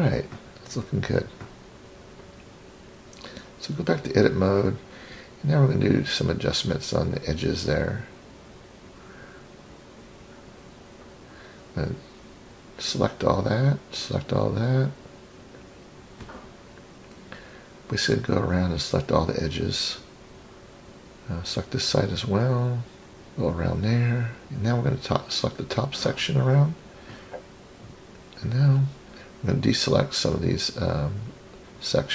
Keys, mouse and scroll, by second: 1.7-2.7 scroll up 3, 2.7 scroll up 1, 4.2-5.1 scroll down 4, 7.2-8.3 drag, 8.7-9.3 scroll up 1, 9.3 scroll up 1, 9.8 click, 11.3 click, 11.6 click, 12.5 scroll up 3, 13.4 shift+click, 13.7 shift+click, 14.4-15.4 scroll down 4, 15.4-15.9 scroll up 2, 16.1 shift+click, 16.3 shift+click, 17.0-17.3 scroll down 2, 18.2 shift+click, 18.4 shift+click, 19.3 middle click, 20.3-20.6 scroll up 3, 21.2 shift+click, 21.4 shift+click, 23.3 shift+click, 23.5 shift+click, 24.1-25.3 scroll down 6, 25.3-26.3 middle drag, 27.4 click, 28.4-29.0 scroll up 1, 29.0-29.3 scroll up 3, 29.7 drag, 30.8 ctrl+click, 31.8 middle click.